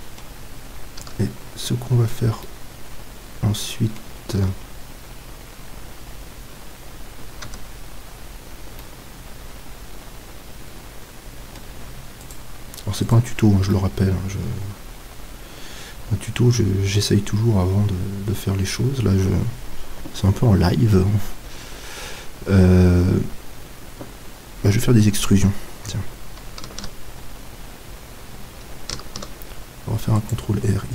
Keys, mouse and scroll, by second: 1.0 z, 1.7-4.2 middle drag, 4.4 z, 7.5 Tab, 8.8-10.6 middle drag, 12.2-14.9 right drag, 13.7-15.6 middle drag, 17.4-26.7 middle drag, 26.7 ctrl+e, 29.1 ctrl+r.